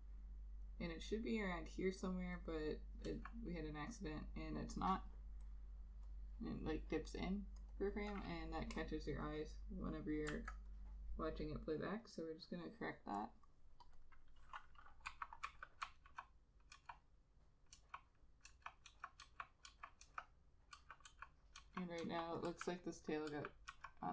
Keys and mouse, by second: 2.5 double click, 3.2 [, 7.9 double click, 14.1 double click, 15.2 [, 15.6 [, 16.2 ], 16.9 ], 17.9-23.4 typing.